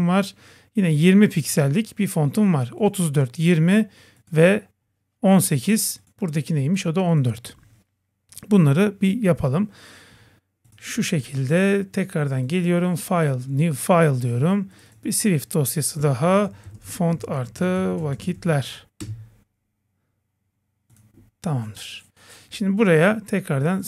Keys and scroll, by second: 19.0 Return.